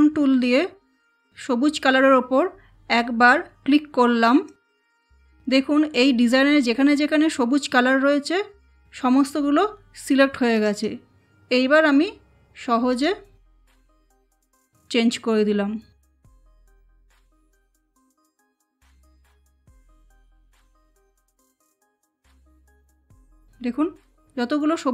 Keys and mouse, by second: 4.5 click, 10.5 click, 12.9 click, 16.8 click, 19.6 click.